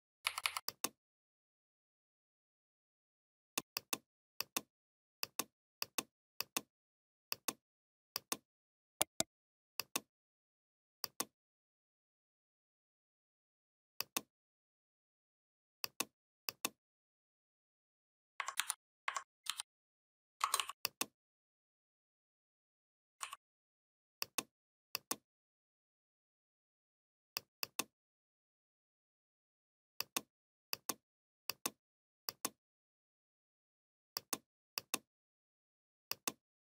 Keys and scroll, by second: 18.4 ctrl+c, 19.3 ctrl+f.